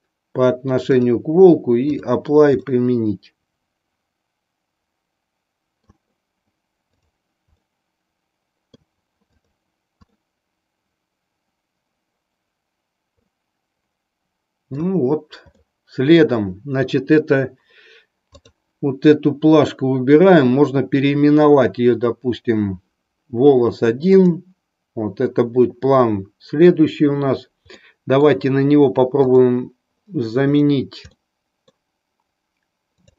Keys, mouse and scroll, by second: 0.9-2.1 drag, 2.6-5.9 middle drag, 6.9 click, 7.6-8.9 middle drag, 9.4 click, 10.1-14.7 middle drag, 15.5 middle click, 18.3 click, 27.8-28.4 middle drag.